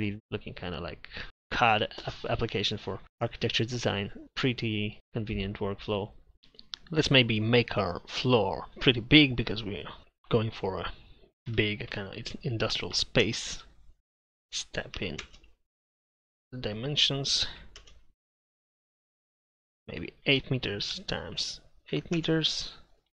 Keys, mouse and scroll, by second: 0.2 a, 13.2 Return, 15.2 Return, 17.8 Return, 22.2 Return.